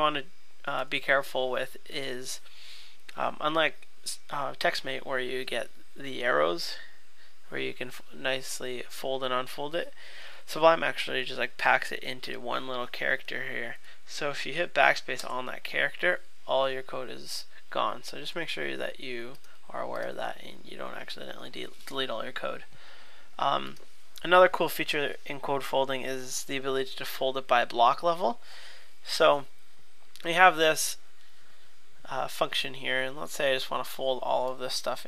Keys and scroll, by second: 0.8 alt+super+[, 18.3 super+z.